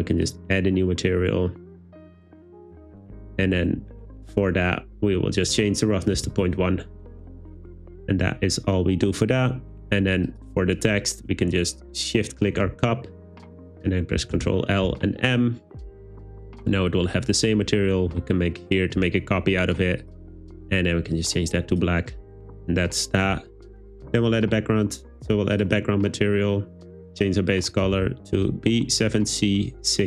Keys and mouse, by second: 0.5 click, 5.4-6.5 drag, 12.1 shift+click, 14.4 super+l, 18.6 click, 20.1 click, 25.6 click.